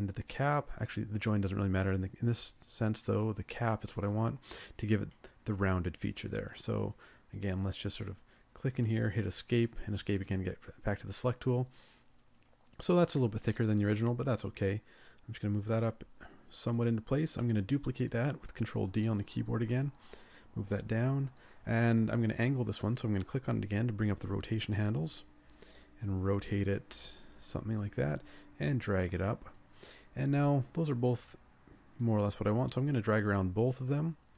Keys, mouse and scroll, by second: 8.9 Escape, 9.5 Escape, 18.9 ctrl+d.